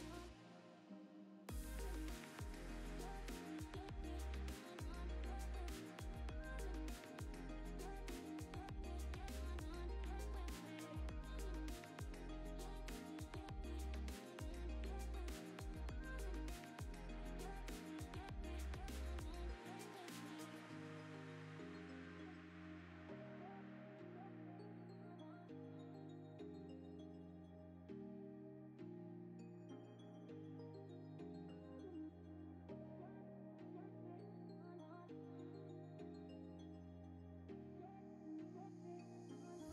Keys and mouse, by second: 2.3 click, 3.3 click, 4.4 ctrl+z, 4.5 ctrl+z, 5.1 ctrl+z, 6.3 click, 6.7 click, 7.3 click, 7.4 Tab, 7.9 middle click, 8.3 shift+middle click, 8.4 middle click, 9.0 click, 9.3 click, 9.6 middle click, 10.3 shift+s, 11.0 middle click, 11.1 shift+a, 11.8 s, 12.6 middle click, 12.8 click, 12.9 middle click, 35.7 r, 37.6-39.7 drag.